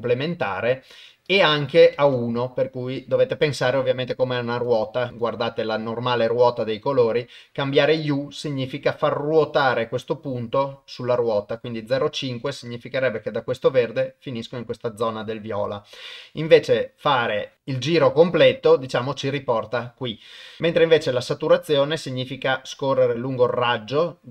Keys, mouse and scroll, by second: 1.3 click.